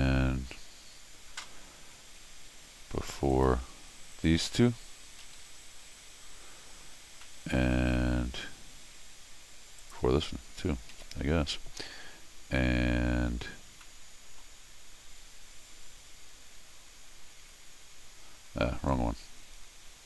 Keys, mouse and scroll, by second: 3.3 click, 4.1 click, 5.2 ctrl+alt+r, 7.2 middle click, 8.2-8.8 scroll up 1, 9.8 click, 10.9 ctrl+alt+r, 12.4 scroll up 1, 13.8 middle click, 17.4 Tab.